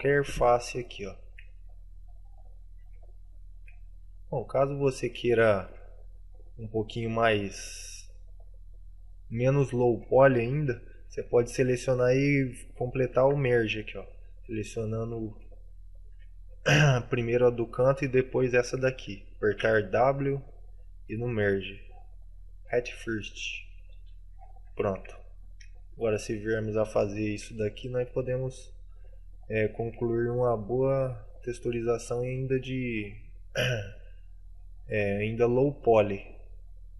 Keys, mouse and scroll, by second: 0.7 shift+middle click, 1.4 shift+right click, 1.7 right click, 2.1 right click, 2.3 middle click, 3.2 shift+middle click, 4.9 click, 5.5 shift+middle click, 6.8 right click, 7.5 middle click, 11.1 shift+right click, 11.2 shift+right click, 11.8 w, 25.3 shift+middle click, 25.9 middle click, 27.3 right click, 28.3 shift+right click, 29.1 right click, 29.7 right click, 29.8 right click, 30.8 right click, 31.1 w, 32.8 middle click, 34.1 middle click, 34.8 middle click, 36.0 right click, 36.5 right click.